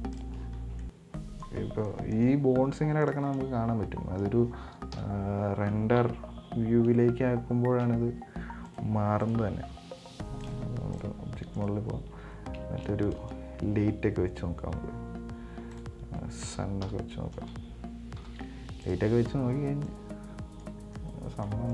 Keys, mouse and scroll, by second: 0.4-0.8 drag, 0.8 scroll down 1, 1.1-1.9 middle drag, 1.9 scroll up 4, 2.1-3.2 middle drag, 3.2 scroll down 1, 3.3-5.2 middle drag, 5.2 KP_1, 9.0 right click, 9.5 right click, 10.6-11.9 drag, 11.9 right click, 12.9 shift+a, 17.1 KP_1, 18.5 g, 20.1 right click, 21.1 scroll down 2, 21.2-21.7 middle drag.